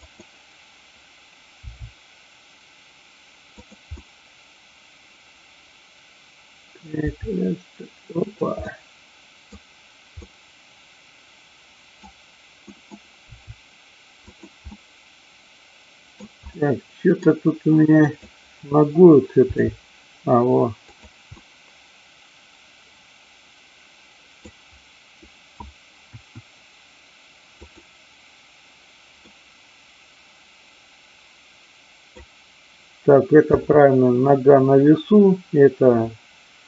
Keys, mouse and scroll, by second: 1.6 r, 3.6 click, 4.0-6.9 middle drag, 7.0 r, 8.3 click, 8.6-9.5 middle drag, 10.3-12.0 middle drag, 12.6 middle drag, 13.3 r, 14.3 click, 14.7-16.3 middle drag, 16.5-17.3 middle drag, 17.9-19.0 drag, 19.4 g, 20.9 click, 21.4-22.3 scroll up 1, 22.3-24.5 middle drag, 26.0 KP_1, 29.3-32.3 middle drag, 33.5 KP_3.